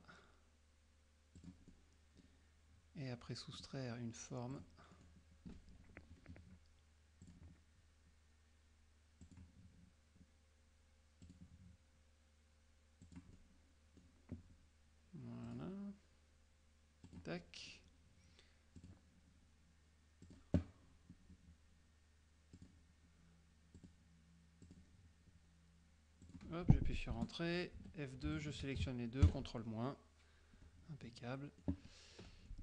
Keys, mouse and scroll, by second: 1.5 click, 1.8 middle click, 3.6 click, 4.6 click, 5.0 middle click, 7.3 click, 9.3 click, 11.3 click, 13.2 click, 13.5 middle click, 15.6 click, 17.2 click, 17.5 middle click, 18.9 click, 20.4 click, 22.7 click, 23.9 click, 24.7 click, 26.3 click, 27.2 Return, 28.4 shift+F2, 28.5 shift+click, 29.3 ctrl+KP_Subtract, 31.2 middle click.